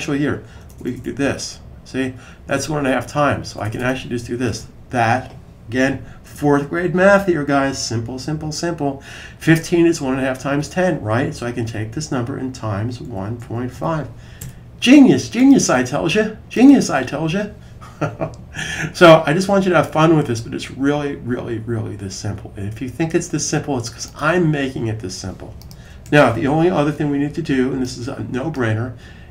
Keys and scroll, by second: 0.0-0.7 typing, 4.2 super+v, 12.1-13.9 typing, 25.9 super+s.